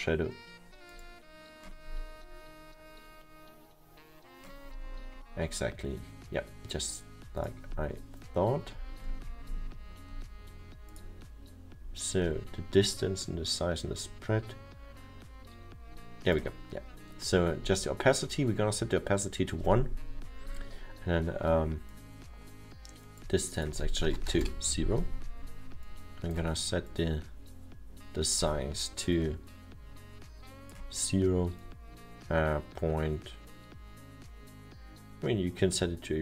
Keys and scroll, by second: 24.4 0, 24.4 Return.